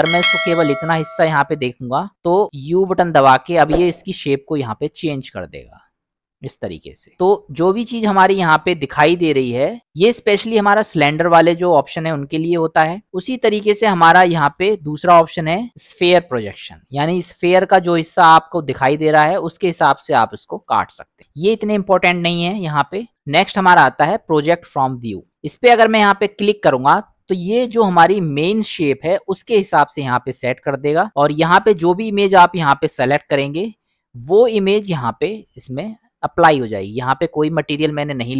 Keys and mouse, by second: 0.3-1.4 middle drag, 2.8 u, 7.6-8.6 middle drag, 9.1 middle click, 10.2-13.0 middle drag, 14.5 u, 31.5 click, 34.0 middle click, 36.7 click, 38.2-38.3 drag.